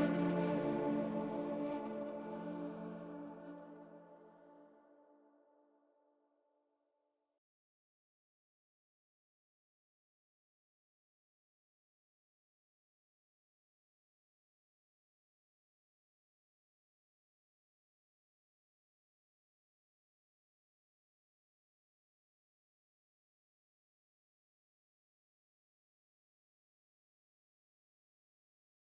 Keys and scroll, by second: 3.6 Escape, 17.5 Escape, 22.9 Delete, 23.5 F3, 24.4 Escape.